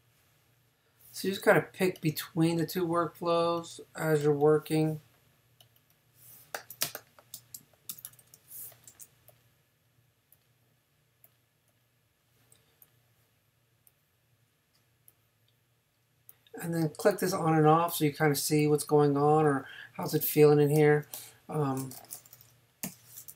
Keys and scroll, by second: 6.8 super+space, 7.9 super+-, 20.2 space, 22.9 n.